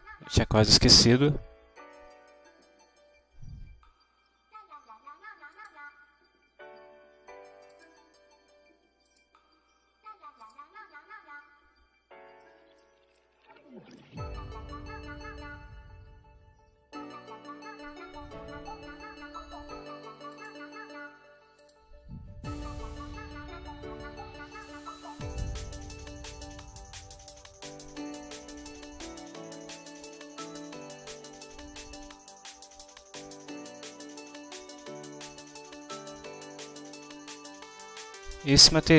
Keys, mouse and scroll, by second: 0.0 ctrl+alt+Right, 5.6 click, 7.7 click, 9.1 click, 10.5 click, 12.4 middle click, 13.2-14.2 ctrl+middle drag, 20.4 click, 21.6 click, 24.6 click, 25.8 0, 26.0 Return, 28.8 click, 30.0 click, 31.2 1, 31.4 Return, 34.6-37.1 middle drag, 37.1-38.0 scroll up 1.